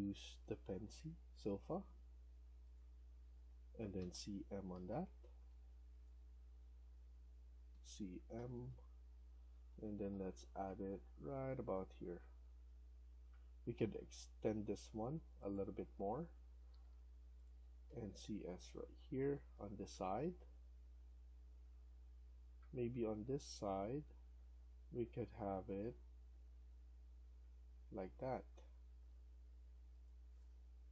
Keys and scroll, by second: 3.9-4.6 typing, 7.6-10.4 typing, 16.3 Escape, 16.6 Escape, 16.8 Escape, 17.7 typing, 29.0 Escape, 29.2 Escape, 29.4 Escape.